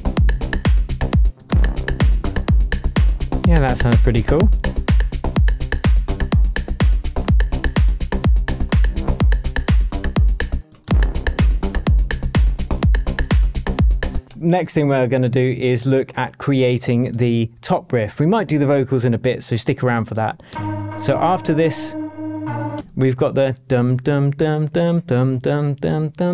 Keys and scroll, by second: 7.2 BackSpace, 8.6 BackSpace, 10.5 space, 14.1 space, 20.5 space, 22.7 space.